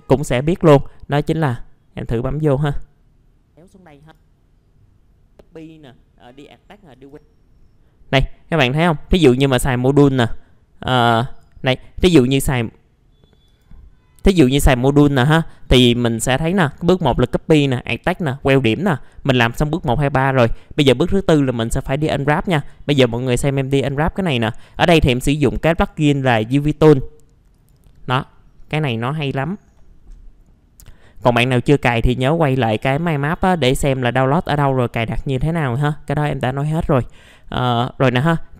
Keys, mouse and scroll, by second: 7.5 scroll up 1, 11.2 click, 25.4 middle click, 25.7 right click, 27.5 click, 29.7 middle click, 32.4 click, 35.0-35.6 scroll up 1, 35.6 F4, 35.8 scroll up 1, 36.2 middle click, 36.8-37.1 scroll down 1, 37.1-38.3 middle drag.